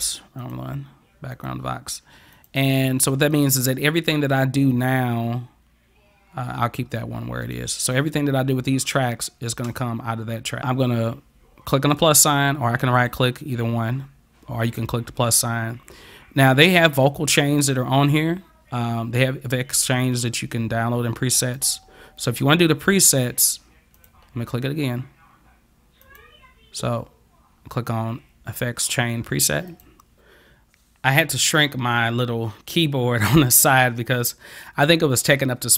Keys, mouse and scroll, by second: 0.4 click, 1.4 click, 2.4 click, 3.4 click, 4.7 click, 7.5 click, 13.0 right click, 14.7 click, 21.6 click, 24.0 click, 26.1 click, 29.7 click.